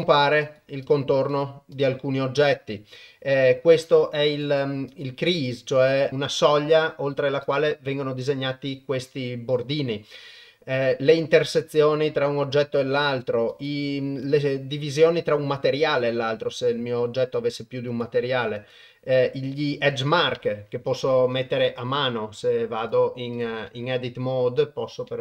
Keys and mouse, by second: 0.4 click, 0.8 click, 1.3 click, 1.7 click, 2.5 click, 4.3 click, 4.9 click, 6.1 click, 7.5 click, 11.2 click, 11.7 click, 13.5 click, 14.2 click, 17.9 click, 18.6 click, 20.8 Tab, 21.3 Tab, 21.7 click, 22.8 click, 23.7 Tab.